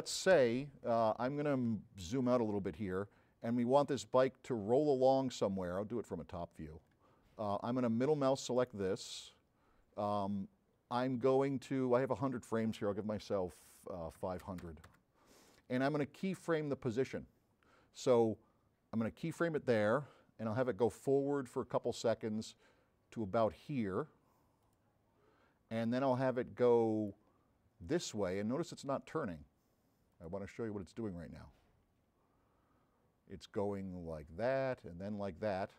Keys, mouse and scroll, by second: 1.8 middle click, 2.8 s, 2.9-5.0 right drag, 5.4 middle click, 5.8 middle click, 6.1 middle click, 6.4 scroll down 2, 8.6 middle click, 9.5-10.1 scroll down 2, 9.8 middle click, 21.0 click, 26.8 click, 27.9-29.3 drag, 30.2 click, 31.3-35.7 drag.